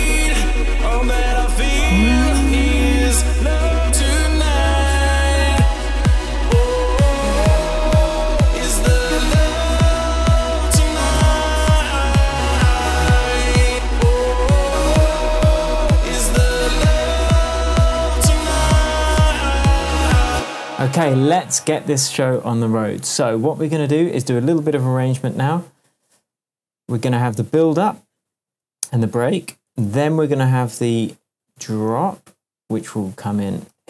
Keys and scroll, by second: 8.7 shift+Tab, 11.2 super+d, 20.3 space, 20.9 super+s, 31.6 BackSpace, 33.7 super+c.